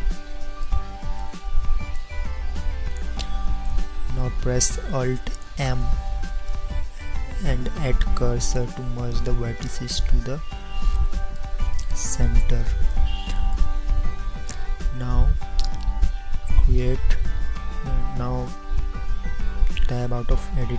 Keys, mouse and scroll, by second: 2.0-3.7 drag, 5.7 alt+m, 9.8-12.7 middle drag, 20.3 Tab.